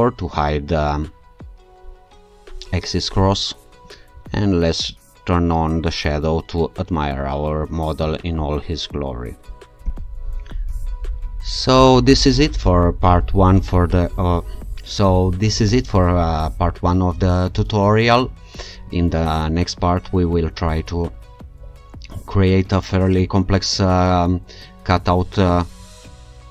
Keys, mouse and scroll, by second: 3.8 q, 9.5 alt+click, 9.8 ctrl+r.